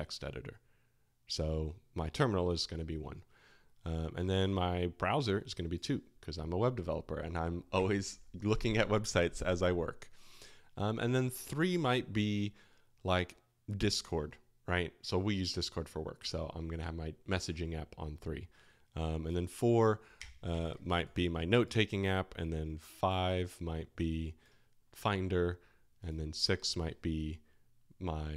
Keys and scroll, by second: 20.1 space, 20.5 [.